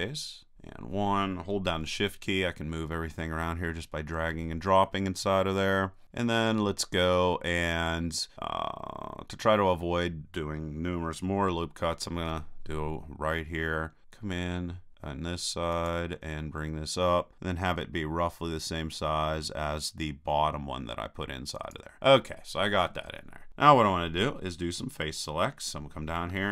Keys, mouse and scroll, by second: 0.5 KP_1, 1.8-9.1 middle drag, 12.1 ctrl+r, 21.7-23.2 drag, 25.2-26.5 drag.